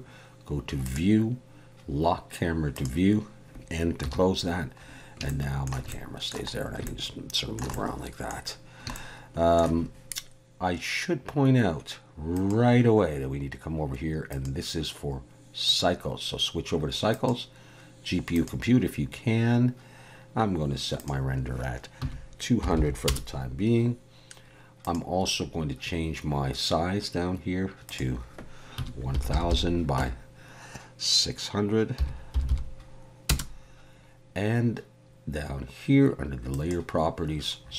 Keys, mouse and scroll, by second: 0.9 click, 2.7 click, 4.0 n, 4.9 scroll up 1, 5.3 shift+middle click, 5.9 middle click, 6.5 scroll up 1, 6.9 shift+middle click, 7.7 middle click, 8.4 scroll down 2, 8.9 shift+middle click, 12.4 click, 14.3 click, 17.1 click, 21.0 click, 22.8 0, 24.8 click, 29.3 click, 29.3 0, 32.5 0, 36.5 click, 37.6-37.7 scroll down 16.